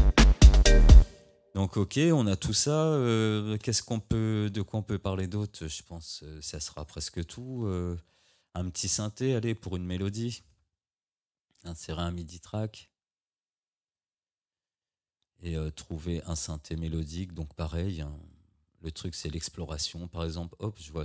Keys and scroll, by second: 1.0 space.